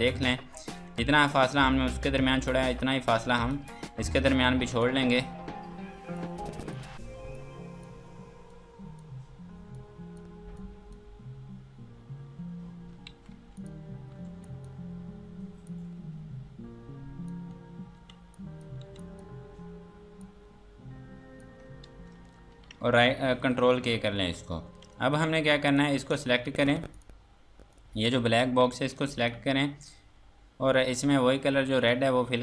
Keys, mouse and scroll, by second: 0.8 F2, 1.2 click, 2.6 F2, 2.8 click, 4.6 F2, 4.8 click, 12.6 scroll down 1, 13.6 click, 14.3 F2, 14.4 click, 17.7 scroll down 1, 18.0 F2, 18.3 click, 18.8 F2, 19.0 click, 21.8 ctrl+space, 22.3 scroll down 1, 23.5 ctrl+k, 24.2 Escape, 24.4 F3, 24.9 click, 25.4 Escape, 25.7 click, 25.9 F2, 26.2 click, 26.7 Escape, 26.9 click, 29.1 click, 31.8 click, 32.2 scroll down 1.